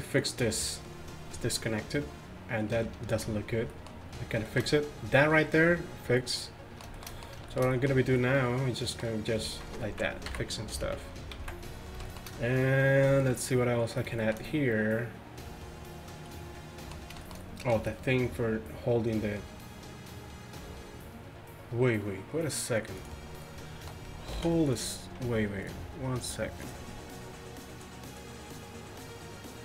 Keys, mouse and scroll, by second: 9.5-11.4 typing, 17.3-17.6 middle drag, 17.7 middle click, 24.4 ctrl+s.